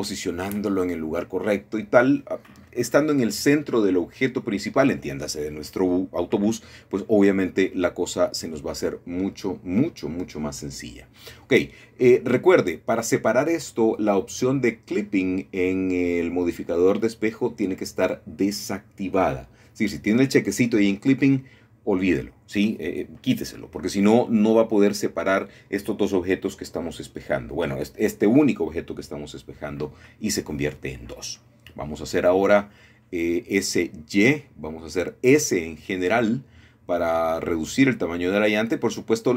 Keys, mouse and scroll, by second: 0.0 scroll down 2, 0.4-2.0 middle drag, 4.1-5.6 middle drag, 5.8 middle click, 6.6 middle click, 6.6 click, 7.2 middle click, 8.0 middle click, 9.7 r, 10.7 x, 13.0 KP_9, 13.2 KP_0, 14.5 Return, 16.5 g, 16.7 y, 18.4 click, 21.4 ctrl+r, 23.1 click, 25.4 click, 28.0 s, 28.3 y, 30.2 click, 32.1 l, 34.1 g, 34.3 y, 35.5 Escape, 36.5 s, 36.9 y.